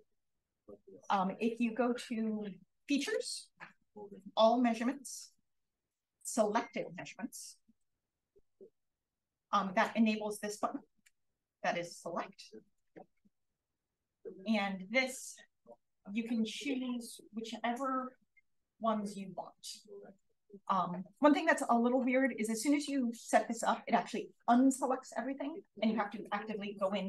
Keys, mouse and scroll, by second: 0.5 click, 2.9 click, 5.1 click, 8.4-11.9 drag, 12.5 click, 15.6-20.5 drag.